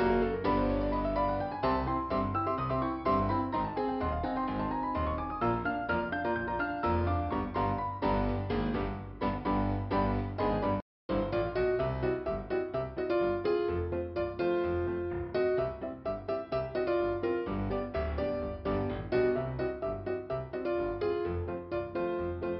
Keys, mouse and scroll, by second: 0.7 click, 1.8 click, 3.1 click, 3.6 click, 6.9 click, 7.0 click, 10.7 ,, 11.9 click, 13.2 click, 15.4 click, 15.7 click, 16.9 click, 17.0 click, 19.0 click, 20.0 click.